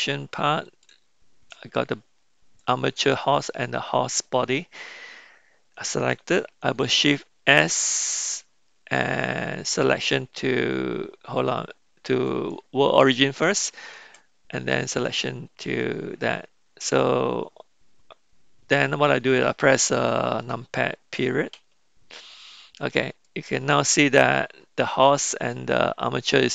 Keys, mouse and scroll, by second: 0.6 shift+click, 6.6 shift+s, 7.8 shift+s, 13.9 shift+s, 21.5 KP_Decimal, 23.2-24.3 middle drag.